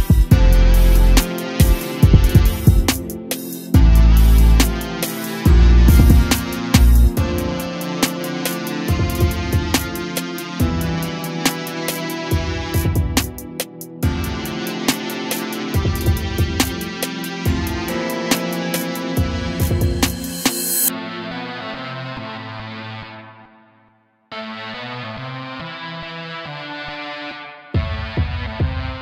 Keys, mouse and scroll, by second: 1.4 click, 4.8 r, 16.8 click, 21.6 click.